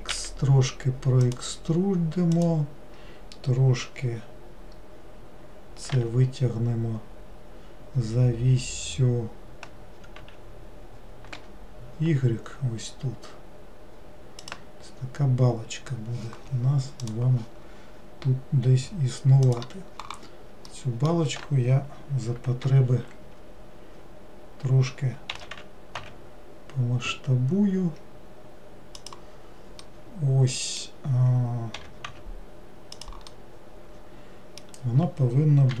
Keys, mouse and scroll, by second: 2.5 click, 20.8-22.7 middle drag, 22.7 ctrl+l, 29.9-31.9 middle drag, 31.9 g, 33.4-35.8 middle drag.